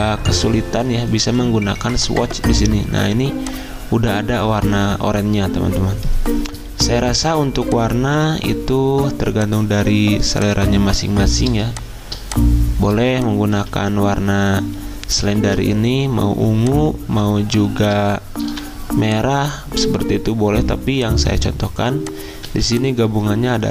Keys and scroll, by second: 6.6 v, 11.6 z, 18.3 ctrl+z, 18.4 v, 22.5 z.